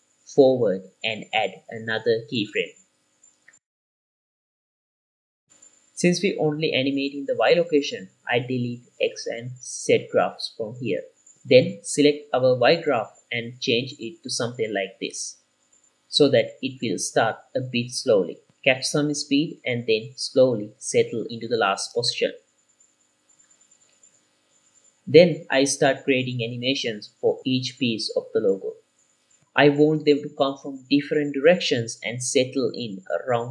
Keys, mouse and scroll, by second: 0.2 g, 0.3 y, 2.1 click, 2.8 i, 4.4-5.4 drag, 6.5 click, 8.6 Delete, 9.2 click, 9.7 Delete, 10.3 click, 10.7 click, 12.8 KP_Decimal, 13.8 drag, 14.8 click, 15.0 middle click, 15.4 click, 16.6 drag, 17.3 space, 20.6 space, 21.3-23.4 drag, 23.4-24.7 middle drag, 26.4 click, 27.4 i, 30.8-31.7 drag, 31.7 scroll down 3, 31.7 shift+middle click, 31.9 g, 32.1 y, 32.8 click, 33.2-33.5 typing, 33.3 right click, 33.4 shift+middle click, 33.4 scroll down 2.